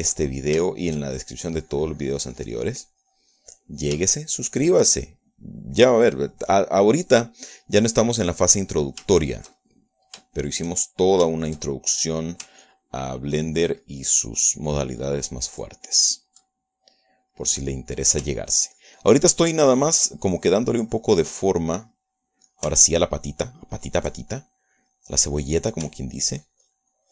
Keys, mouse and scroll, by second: 0.2-2.4 middle drag, 2.7-5.3 drag, 5.5 shift+middle click, 6.6 middle click, 7.5-10.3 middle drag, 10.4 shift+middle click, 11.0 shift+middle click, 11.6-13.6 shift+middle drag, 13.9-17.8 ctrl+drag, 17.8 ctrl+middle click, 19.2 middle click, 19.8-22.5 ctrl+drag, 22.5-23.5 ctrl+middle drag, 24.1-27.1 ctrl+drag.